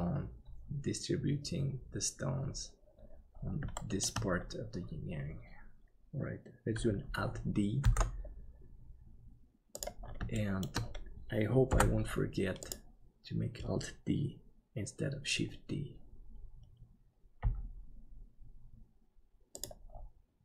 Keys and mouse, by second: 3.8 shift+middle click, 8.1 alt+d, 10.4 middle click, 11.7 n, 17.4 g.